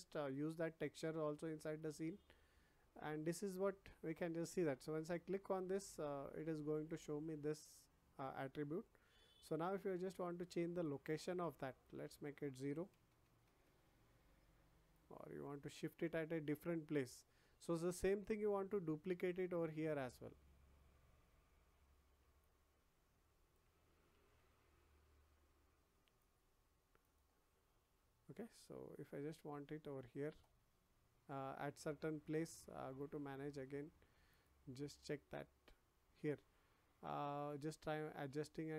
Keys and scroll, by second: 13.0 0, 13.6 Return, 24.1 ctrl+z.